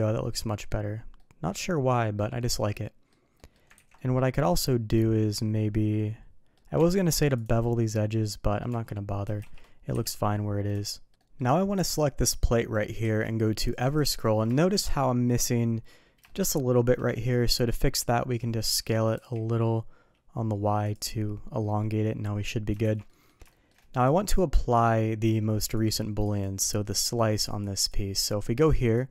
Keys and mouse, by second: 1.1-2.1 middle drag, 2.7-3.1 middle drag, 3.3 middle click, 3.8 ctrl+z, 3.9 middle click, 4.6-6.5 middle drag, 7.6-8.6 middle drag, 8.7 Tab, 9.3 shift+2, 9.9 KP_3, 10.8-11.1 shift+middle drag, 11.1 middle click, 11.8 click, 13.0 q, 14.5 shift+middle drag, 15.0-15.3 middle drag, 16.2 shift+middle click, 21.6-22.4 middle drag, 22.8 shift+2, 23.0 middle drag, 23.5 shift+middle drag, 25.7 click, 26.2 click, 27.4 click, 27.7 click, 29.0-29.1 drag.